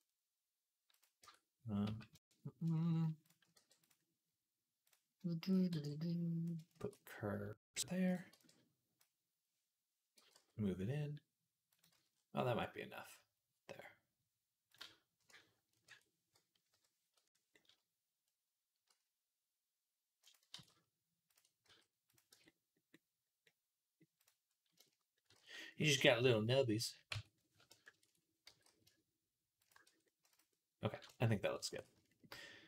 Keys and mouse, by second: 0.8 click, 0.8-2.7 middle drag, 1.1 Tab, 1.7 z, 3.4 b, 4.7 click, 5.5 b, 6.6 shift+s, 7.9 click, 8.1 b, 10.0 g, 11.7 z, 14.8-18.1 ctrl+middle drag, 15.6 ctrl+KP_Add, 18.8 s, 20.4 alt+s, 21.5 s, 22.1 Tab, 22.1-24.9 middle drag, 24.0 click, 25.2 ctrl+s, 27.0 Tab, 27.7 ctrl+KP_Add, 28.7 g, 29.6-31.4 middle drag, 29.7 Tab, 31.6 ctrl+s.